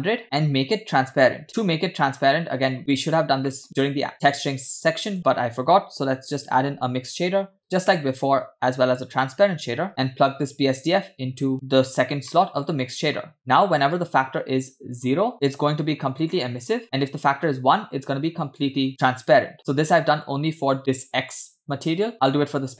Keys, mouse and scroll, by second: 0.2 middle click, 0.2-1.4 scroll up 12, 1.5 click, 2.2 click, 3.2-3.7 scroll down 2, 3.5 middle click, 3.8 shift+a, 8.7 shift+a, 10.5-12.3 drag, 12.4 middle click, 12.8-13.7 scroll up 3, 13.9-15.3 drag, 16.2 click, 17.0-18.7 drag.